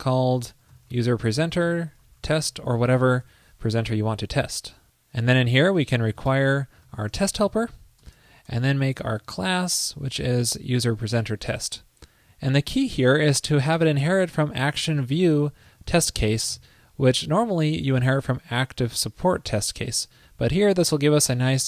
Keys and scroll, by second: 8.2 super+Return, 10.7 super+Right, 17.4 alt+Left, 17.5 alt+Left, 20.5 super+Right.